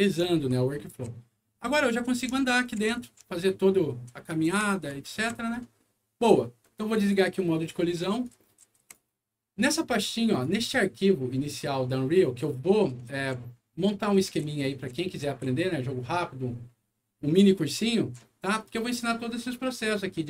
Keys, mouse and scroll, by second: 0.0-2.6 typing, 3.9-5.7 typing, 6.9 click, 8.2 right click, 8.4 a, 8.8 s, 10.3 click, 12.1-15.7 right drag, 12.8-14.1 typing, 15.2 w, 17.3-18.6 right drag, 18.0 d.